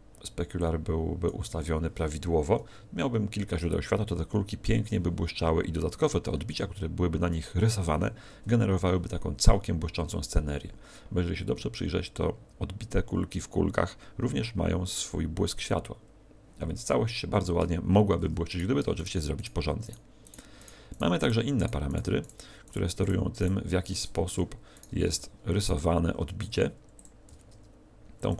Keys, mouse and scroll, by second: 17.6 Escape, 17.6-18.5 scroll down 4, 18.5 right click, 19.0 shift+right click, 19.6 right click, 19.9 shift+right click, 20.3 shift+right click, 20.7 shift+right click, 20.9 shift+right click, 21.3 shift+right click, 21.7 shift+right click, 21.9 shift+right click, 22.3 shift+right click, 22.7 shift+right click, 24.2 x, 24.7 right click, 25.0 x, 25.6 right click.